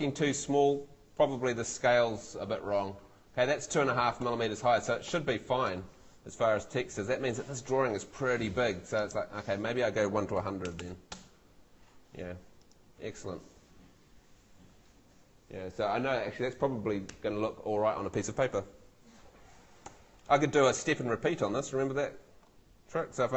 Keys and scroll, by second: 4.2 Escape, 10.1-11.1 typing, 13.0 Home, 19.9 Home.